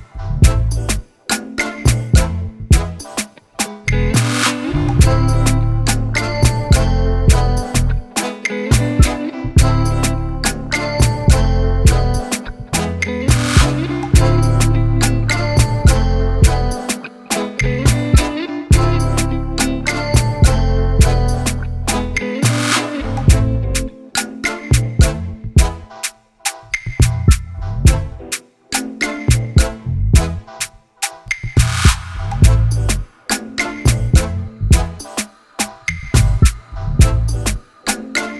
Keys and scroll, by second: 6.0 ctrl+z, 10.0 ctrl+z, 14.4 ctrl+[, 17.5 Up, 18.2 ctrl+=, 20.4 ctrl+-.